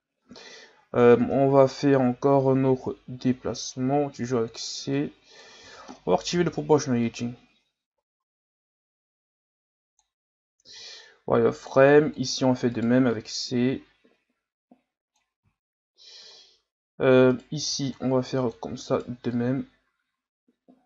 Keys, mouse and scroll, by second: 0.6 scroll up 2, 1.2 Tab, 5.0 click, 5.6 ctrl+z, 6.3 o, 7.0-10.0 drag, 10.7 z, 11.6 right click, 11.8 c, 13.1-15.6 drag, 15.6-16.3 scroll up 4, 16.3 scroll down 3, 17.3 right click, 17.6 c, 19.3-20.8 drag.